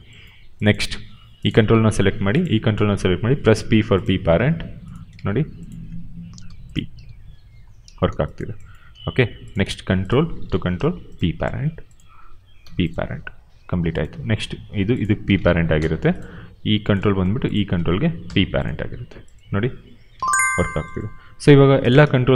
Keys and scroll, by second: 0.8 q, 3.5 p, 6.3 p, 6.9 e, 7.7 ctrl+z, 8.8 q, 10.6 p, 12.5 p, 15.7 p, 18.1 p, 19.4 e, 20.1 ctrl+z, 21.3 q.